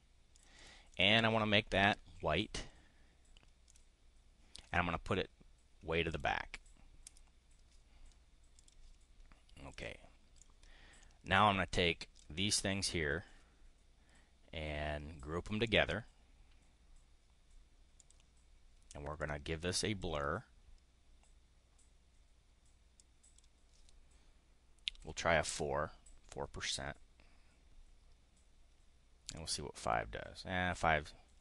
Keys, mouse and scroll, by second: 0.3 click, 0.8 click, 3.7 click, 6.0 click, 7.0 click, 8.5 click, 9.6 click, 10.3-12.2 drag, 15.6 click, 18.0 click, 19.2 click, 22.9 click, 25.0 4, 25.4 Return, 29.3 click, 31.3 click.